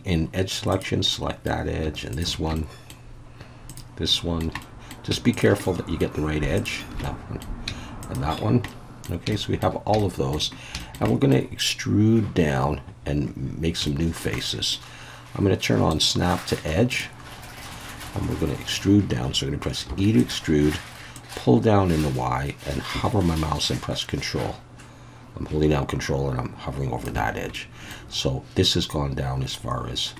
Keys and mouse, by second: 0.7 click, 1.1 middle click, 2.2 shift+click, 2.5 shift+middle click, 4.1 shift+middle click, 4.6 middle click, 5.3 shift+click, 5.6 shift+middle click, 6.6 shift+click, 7.0 middle click, 8.0 shift+click, 8.7 middle click, 9.3 shift+middle click, 10.0 shift+middle click, 10.8 shift+middle click, 11.1 middle click, 13.9 shift+middle click, 14.4 middle click, 15.9-17.2 drag, 19.9 e, 20.2 click, 21.2-27.0 drag, 27.5 middle click.